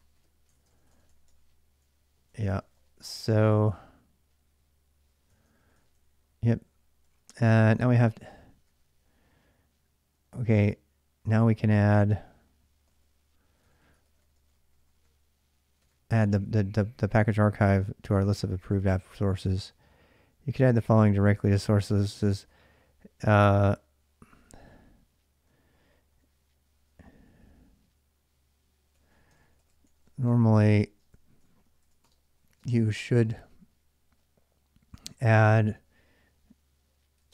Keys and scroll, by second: 0.0-18.7 typing, 2.1 ctrl+[, 5.1 ctrl+[, 5.5 Return, 18.5 ctrl+[, 22.0-33.3 typing, 34.7-35.1 typing, 36.7-37.3 typing.